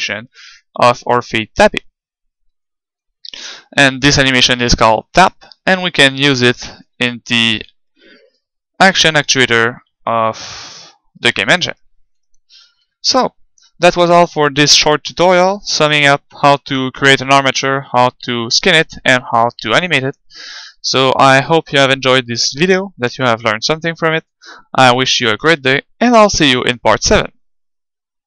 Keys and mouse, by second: 3.7 alt+a, 6.8-8.7 drag, 12.4-16.2 middle drag.